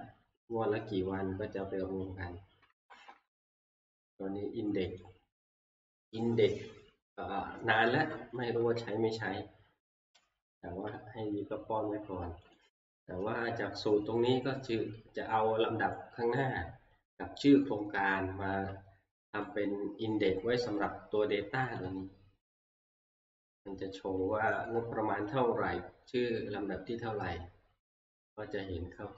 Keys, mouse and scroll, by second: 1.8 Right, 2.3 Right, 2.3 Right, 2.5 Right, 2.7 Right, 3.0 Right, 3.1-4.3 drag, 3.2 Right, 5.0-8.2 drag, 8.6 Left, 12.6 Left, 12.6 click, 13.1 F2, 13.1 click, 18.5 Tab, 19.5 click, 21.9 click, 24.7 click, 26.3 click.